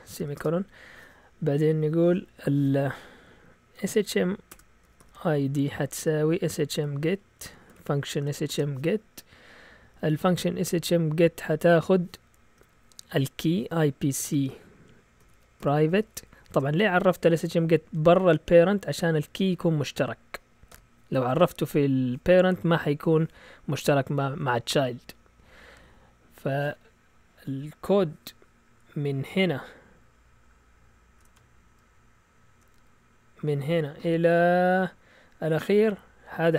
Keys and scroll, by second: 0.0-0.9 typing, 3.5-8.5 typing, 12.5-16.9 typing, 18.3 Down, 19.0-19.5 typing, 20.7 typing, 31.4 shift+super+z, 32.0 z.